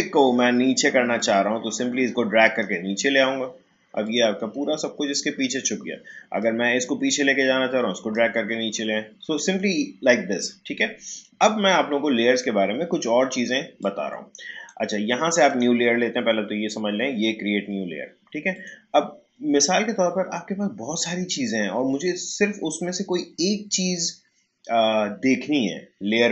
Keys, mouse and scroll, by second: 1.1-4.0 drag, 6.4-11.1 drag, 13.8-15.5 drag, 18.5 click.